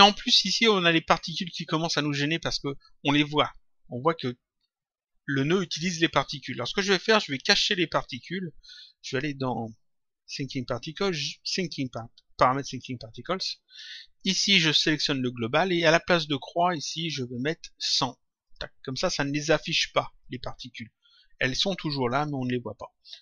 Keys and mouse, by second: 7.4 click, 9.0 click, 11.8 click, 13.1 click, 14.5 click, 16.9 click, 18.4 click, 20.2 click.